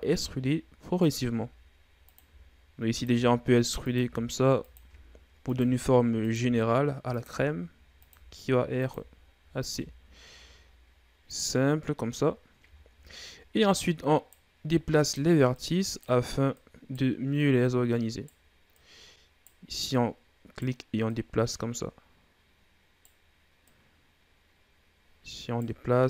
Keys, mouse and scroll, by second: 1.1 e, 2.1 e, 2.9 e, 3.8 e, 5.4-9.5 typing, 12.6-13.6 scroll up 1, 13.6 right click, 14.5 right click, 15.4 right click, 16.4 right click, 17.2 right click, 18.6 right click, 19.7 right click, 20.9 right click, 23.5 right click.